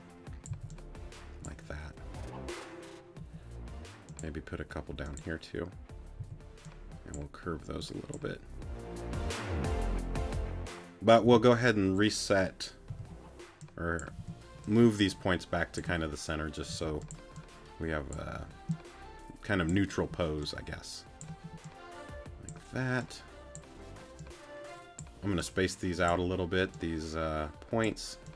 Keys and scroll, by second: 0.5 c, 3.2 a, 6.2 c, 11.2 g, 12.9 g, 14.2 t.